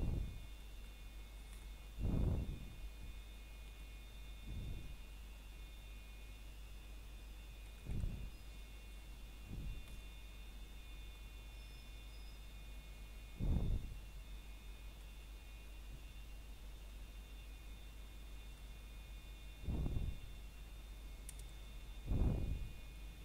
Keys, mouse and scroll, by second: 0.0 middle click, 0.6 right click, 1.0 scroll down 1, 1.2 middle click, 1.8-2.3 scroll up 2, 2.0 middle click, 3.0 c, 3.5 click, 5.0 right click, 5.3 scroll down 1, 5.6 middle click, 10.7 r, 16.0 Escape, 17.0 o, 20.8-22.6 scroll up 1.